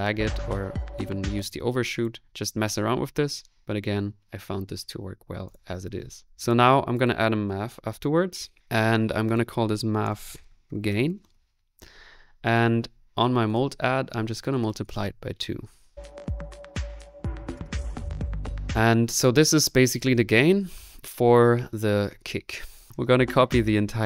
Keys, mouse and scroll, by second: 0.2 middle click, 1.0 click, 1.1-15.7 drag, 7.4-8.2 typing, 15.7 middle click, 18.6 space, 22.9 click.